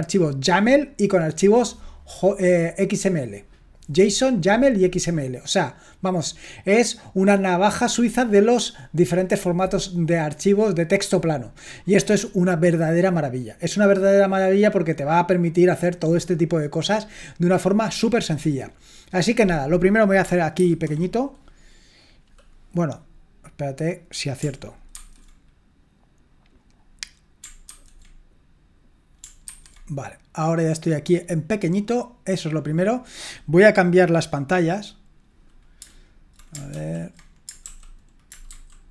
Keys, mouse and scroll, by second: 20.6 ctrl+2, 23.8 click, 25.0 ctrl+2, 26.7 click, 27.8 ctrl+2, 29.5 ctrl+1, 36.8 ctrl+l, 37.7 super+l, 38.6 shift+super+h.